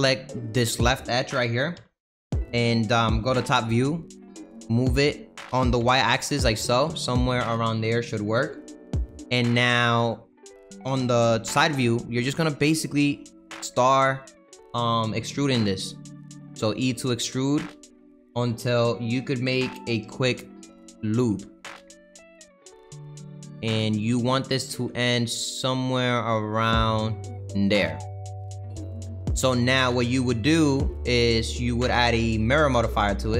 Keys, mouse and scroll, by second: 0.3 click, 1.7 KP_3, 2.6 middle click, 3.3 KP_7, 4.4 g, 9.6-10.9 middle drag, 10.9 KP_3, 12.1 e, 13.4 e, 15.3 e, 16.2 e, 20.2 e, 21.2 e, 22.0 e, 22.8 e, 23.9 e, 24.7 e, 27.9 middle click, 28.5 Tab, 28.8 middle click, 29.2-30.8 scroll down 2, 30.8-33.3 middle drag.